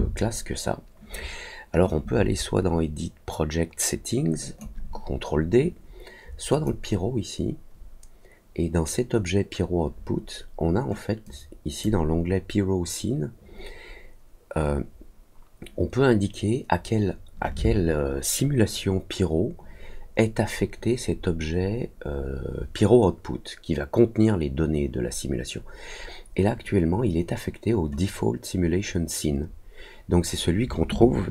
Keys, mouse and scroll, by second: 1.8-4.5 drag, 6.4 click, 11.2 click.